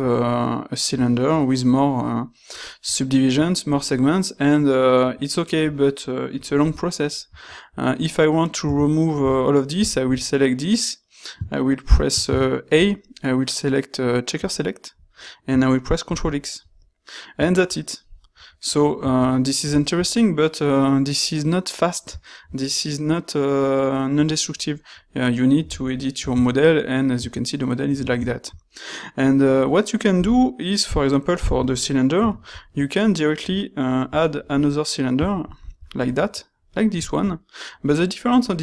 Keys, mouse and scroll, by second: 12.3 a, 16.0 ctrl+x, 30.1 x.